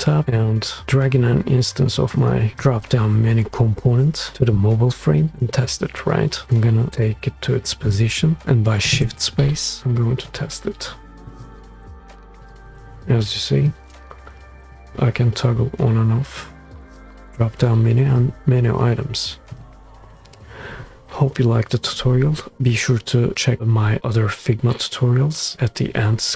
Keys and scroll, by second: 9.0 shift+space.